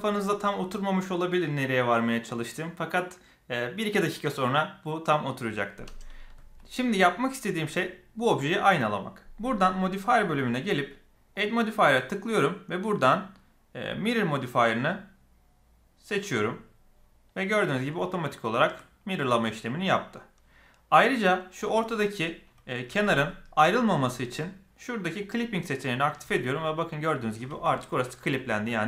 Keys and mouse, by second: 10.1 click, 11.3-16.1 drag, 17.8 shift+middle click, 22.8 g, 25.1 click, 26.2 g.